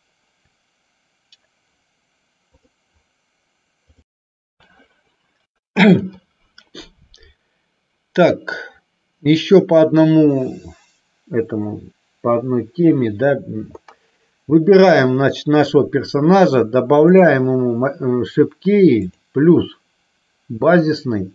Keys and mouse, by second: 14.9 click, 17.1 click, 19.2 click.